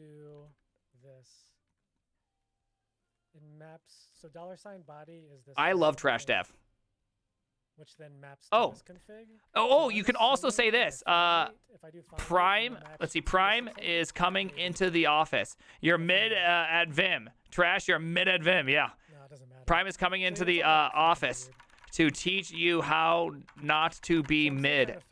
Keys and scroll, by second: 11.9-16.1 typing, 20.3-25.1 typing.